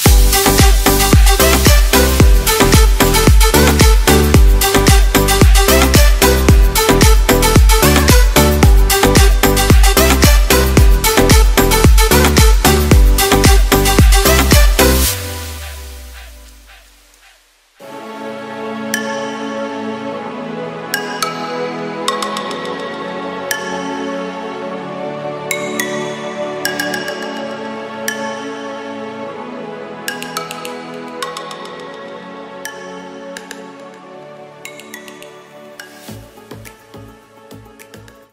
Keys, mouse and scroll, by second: 1.3 middle click, 3.1 click, 5.4 middle click, 9.9 middle click, 12.0 click, 15.6 middle click, 17.3 scroll down 1, 17.6 shift+middle click, 19.6 click, 23.4 middle click, 24.2 shift+middle click.